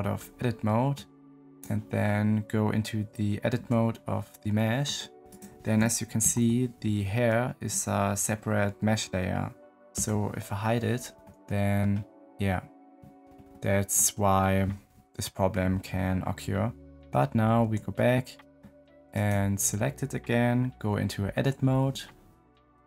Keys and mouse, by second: 0.6 middle click, 1.4 middle click, 3.5 Tab, 4.5 middle click, 5.2 middle click, 6.1 ctrl+l, 9.9 h, 11.1 middle click, 11.7 click, 13.5 click, 17.5 Tab, 19.0 click, 21.3 Tab.